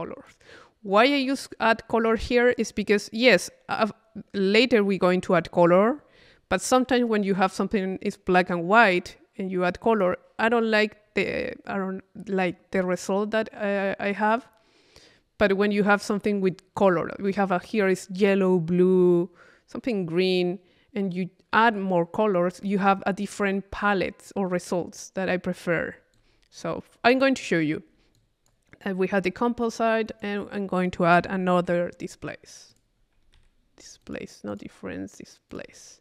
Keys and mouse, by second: 0.9 click, 2.2 click, 16.1 click, 26.1 click, 28.1 click, 30.1 right click, 30.8 click, 31.7 i, 32.7 click, 33.3 Escape, 34.0 right click, 34.5 click, 35.5 click.